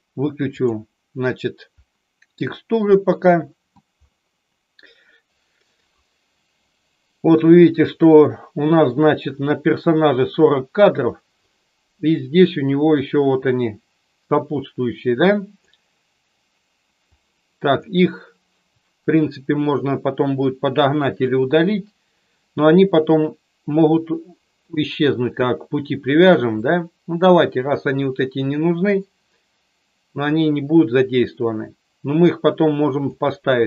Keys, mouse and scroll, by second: 0.5 click, 5.3 a, 8.0 middle click, 10.2 click, 12.4-15.7 drag, 17.1-17.8 drag, 26.6-28.1 drag, 30.3-33.1 drag.